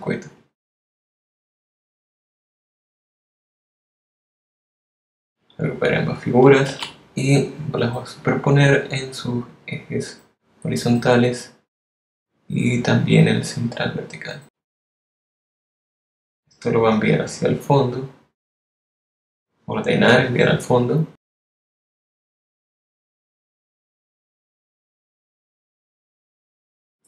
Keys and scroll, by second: 6.0 super+g, 7.5 super+g, 24.4 v.